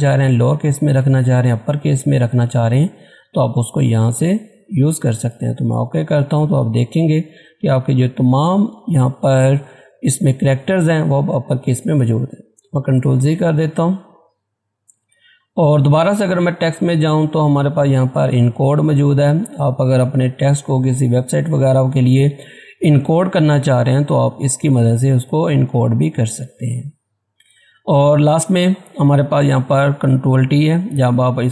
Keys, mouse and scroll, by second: 3.9 click, 12.7 click, 12.9 ctrl+z, 15.3 click, 20.3 click, 26.5 click, 30.3 click.